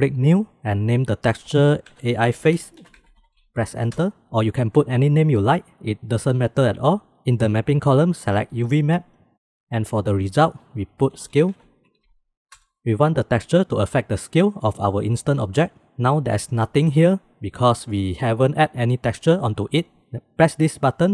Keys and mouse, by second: 0.3 click, 1.1 click, 1.2-4.5 middle drag, 7.9-9.4 drag, 10.6-12.7 drag, 18.7-19.4 drag.